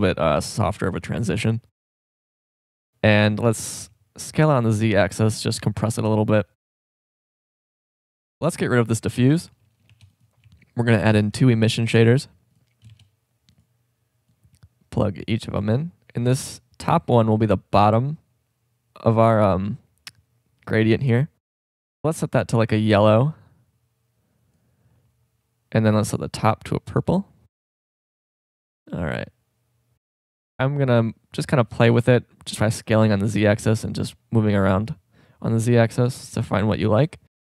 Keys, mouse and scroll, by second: 3.0-3.4 drag, 3.4 s, 3.6-4.9 drag, 5.2-7.0 drag, 7.1-8.3 middle drag, 8.9 right click, 9.3 Delete, 9.9 shift+a, 13.1 shift+d, 14.3-17.0 drag, 18.2 click, 21.7-23.6 drag, 25.0 middle click, 28.8-30.3 drag, 31.6 s, 33.8-35.6 drag.